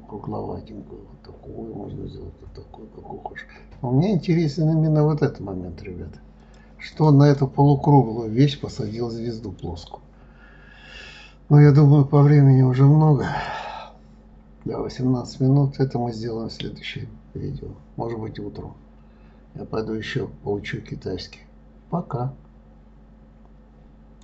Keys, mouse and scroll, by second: 7.3 click, 7.8-10.8 middle drag.